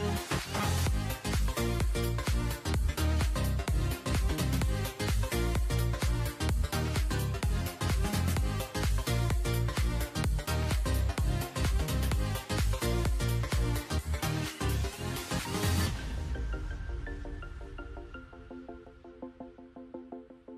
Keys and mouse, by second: 0.9 a, 1.0 a, 1.1 w, 1.5 a, 1.6 Tab, 2.5 ctrl+a, 4.5 alt+h, 7.1 ctrl+j, 7.1 middle drag, 8.6 shift+h, 8.9 Tab, 9.3 alt+h, 9.7 a, 9.9 a, 10.0 w, 10.4 a, 12.0 z, 13.0 z, 13.3 a, 13.4 w, 13.8 a, 13.9 Tab, 14.4 alt+h, 15.0 a, 15.8 shift+c, 19.0 shift+h, 19.5 Tab, 19.8 a, 19.9 w, 20.4 a.